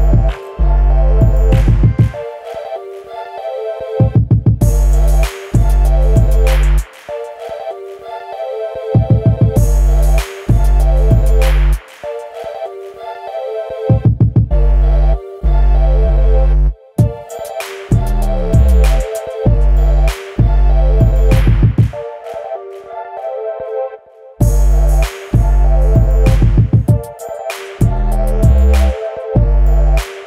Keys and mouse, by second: 0.1-1.1 drag, 1.6-2.7 middle drag, 3.1-3.8 middle drag, 5.1 Delete, 5.4-5.9 middle drag, 6.2-6.6 middle drag, 7.1 middle click, 8.1 middle click, 8.8 KP_1, 9.9 click, 12.9 click, 13.4-13.8 drag, 14.6 Tab, 15.6 click, 16.7 click, 17.3-18.5 drag, 20.5-21.9 drag, 22.6-25.3 drag, 25.9-26.3 drag, 27.1 click, 29.4 click, 30.1 Tab.